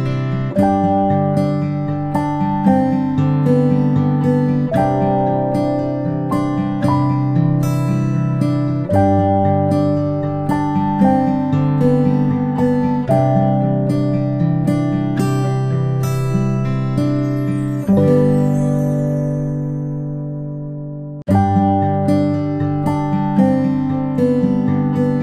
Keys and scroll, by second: 1.7 ctrl+z.